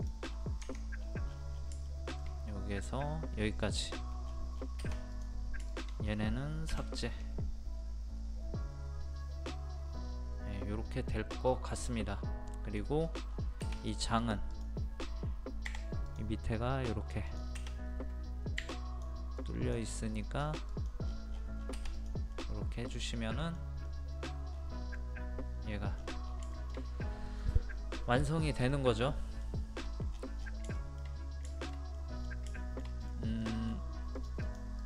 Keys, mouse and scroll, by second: 0.0 click, 0.3-0.6 scroll down 1, 1.0 scroll down 1, 1.9 shift+middle click, 3.8 click, 4.3 scroll down 1, 5.2 click, 5.7 shift+click, 6.7 Delete, 7.1-11.8 middle drag, 11.8 scroll down 1, 12.0 scroll up 1, 12.1 scroll down 1, 12.5 middle click, 12.8 scroll up 1, 13.8-15.5 drag, 15.5 click, 15.7 p, 16.0 click, 18.5 click, 18.6 e, 18.7 click, 21.0 scroll down 1, 21.1 scroll up 1, 21.3 scroll down 1, 21.9 click, 22.3-23.6 middle drag, 23.6 scroll up 1, 23.9 middle click, 24.5-24.8 scroll up 1, 24.9 middle click, 25.7 scroll down 1, 26.5 shift+middle click, 27.7-28.1 scroll up 1, 28.6 scroll down 1, 28.7 middle click, 29.7-30.1 scroll down 1, 30.4 scroll down 1, 30.8 shift+middle click, 31.4 middle click, 32.5-33.0 shift+scroll up 2, 32.5 middle click, 33.4 middle click, 33.7 scroll up 1, 34.1 click.